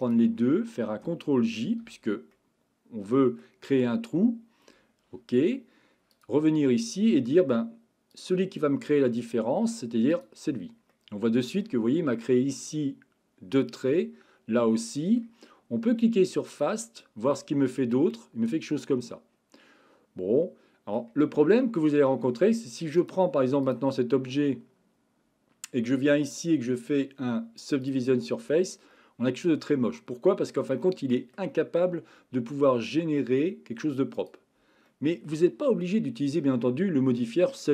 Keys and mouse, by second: 1.7 ctrl+j, 2.3-3.4 middle drag, 6.1 click, 10.9-11.6 middle drag, 14.7-15.2 middle drag, 16.5 click, 17.6-21.0 middle drag, 21.6-22.3 middle drag, 23.0 drag, 26.0-28.2 drag, 28.9-31.4 middle drag, 34.9 middle click, 37.2-37.6 shift+middle drag.